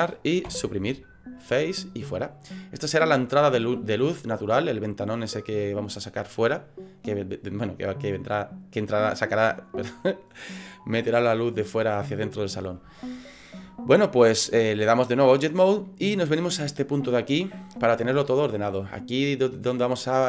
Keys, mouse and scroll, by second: 0.4 Delete, 2.2 middle click, 13.0 shift+middle click, 14.7 click.